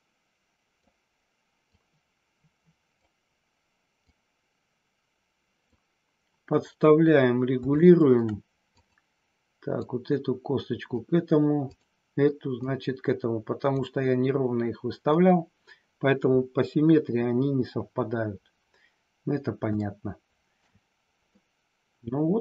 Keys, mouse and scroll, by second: 1.7-3.0 drag, 4.0-5.7 drag, 7.8 shift+middle click, 8.6 click, 9.8-10.8 drag, 11.7 click, 12.6-13.6 drag, 19.7 shift+middle click, 21.2 scroll up 2, 21.4-22.4 middle drag.